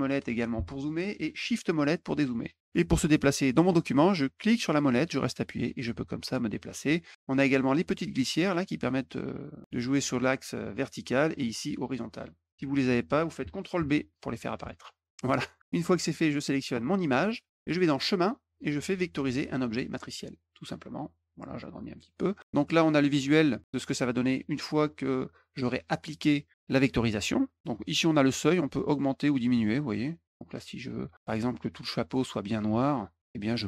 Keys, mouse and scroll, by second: 0.1 middle click, 1.8 shift+middle click, 4.3-6.8 middle drag, 7.7-10.8 drag, 11.9 click, 12.5 ctrl+b, 13.7 ctrl+b, 14.6 ctrl+b, 17.8 click, 20.0 click, 21.4 click, 28.7-31.1 drag.